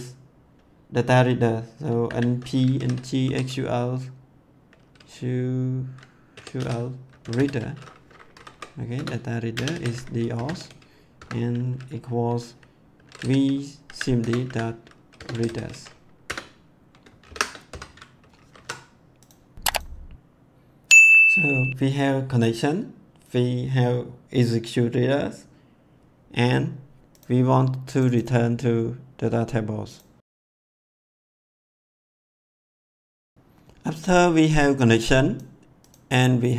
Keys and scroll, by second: 1.8-3.7 typing, 6.1-7.8 typing, 8.3 Down, 8.9 Return, 9.5-11.1 typing, 13.1-15.9 typing, 14.2 Return, 16.2 Return, 17.2 shift+9, 17.6 ;, 18.1 ctrl+s.